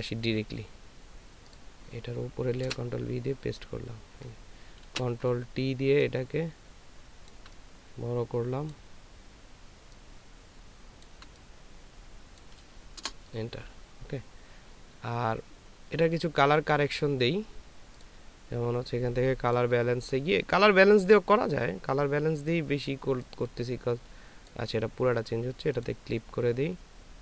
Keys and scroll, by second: 2.6 ctrl+v, 4.8 ctrl+t, 13.0 Return.